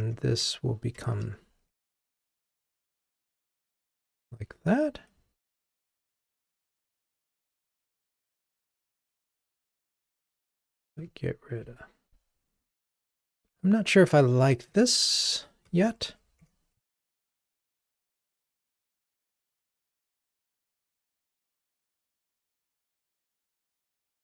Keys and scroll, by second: 1.1 ctrl+r, 14.7 super+BackSpace, 19.6 ctrl+r.